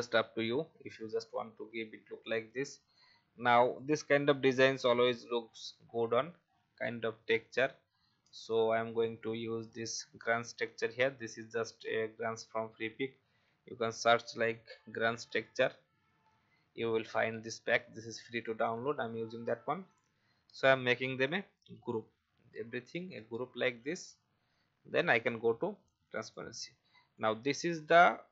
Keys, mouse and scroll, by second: 0.5 alt+scroll down 1, 1.3-1.7 alt+scroll down 1, 1.9 v, 2.2 click, 4.7-5.1 alt+scroll down 1, 5.3-6.4 scroll up 1, 6.4-7.1 scroll down 1, 8.5 click, 9.5-10.2 scroll up 1, 10.2 click, 13.4 v, 15.0 ctrl+c, 18.6 click, 22.9 ctrl+g, 25.1 click.